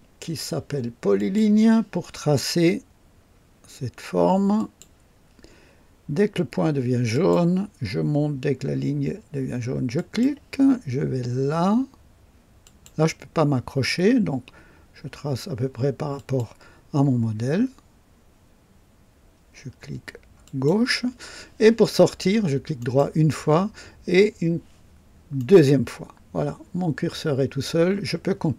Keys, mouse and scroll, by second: 1.2 click, 4.6 click, 7.1 click, 9.9 click, 12.6 click, 16.1 click, 20.4 click, 22.8 right click, 25.4 right click.